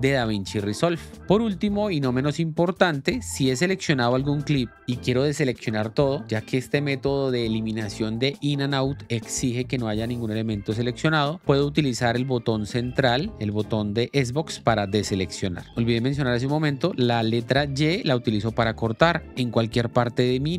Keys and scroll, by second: 3.3 k, 14.7 0, 18.8 ctrl+b, 19.7 l.